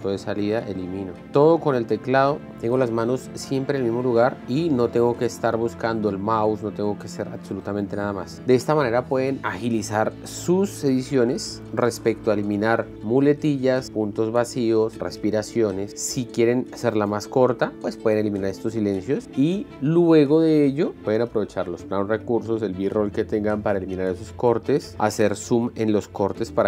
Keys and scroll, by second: 0.0-0.9 typing, 0.9 End.